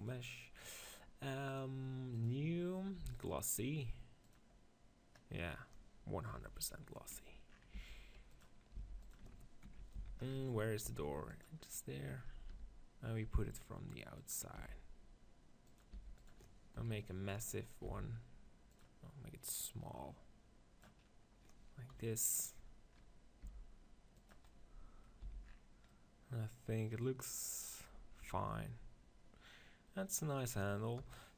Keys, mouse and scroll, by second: 0.0 click, 2.1-5.0 drag, 6.1 KP_7, 7.6 g, 8.6 s, 9.0 click, 9.8 z, 10.7 g, 12.4 r, 14.2 click, 14.4 g, 15.9 r, 16.6 click, 16.6 KP_1, 17.8 s, 18.7-21.1 drag, 21.1-22.8 middle drag, 21.8 KP_7, 23.3 g, 25.2 z, 28.1 middle click, 30.9 KP_0.